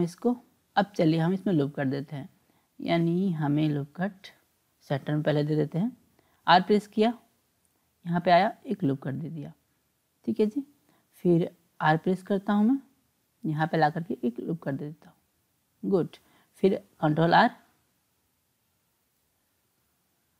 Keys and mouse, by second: 6.4 ctrl+r, 10.0 click, 11.8 ctrl+r, 16.7 ctrl+r, 19.7 ctrl+r.